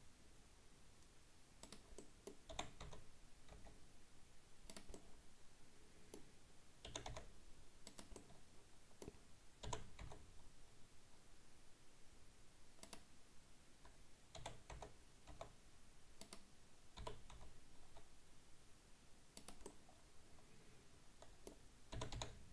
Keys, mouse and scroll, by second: 2.0 middle click, 2.6 r, 5.0-6.9 middle drag, 6.9 g, 8.2-9.7 middle drag, 9.7 g, 14.4 r, 17.0 g, 19.7-22.0 middle drag, 22.0 g.